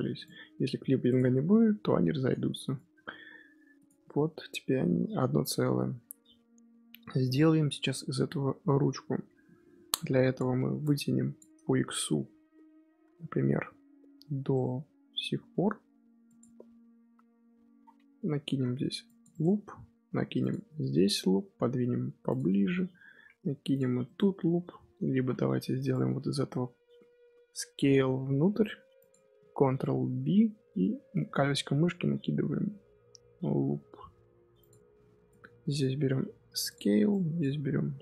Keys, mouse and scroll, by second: 1.0 click, 1.4 g, 3.7 click, 4.3-6.3 scroll down 1, 6.3-9.4 shift+middle drag, 9.9-10.7 scroll up 3, 10.7 click, 12.0-12.5 scroll down 2, 12.5-13.2 scroll down 1, 13.2-15.1 scroll down 1, 15.1 g, 18.4 ctrl+r, 20.0 ctrl+r, 25.0 ctrl+z, 25.4 2, 25.8 click, 26.5 scroll up 2, 27.4 s, 29.6 ctrl+b, 35.2 click, 35.9 s, 37.0 click, 37.6 s.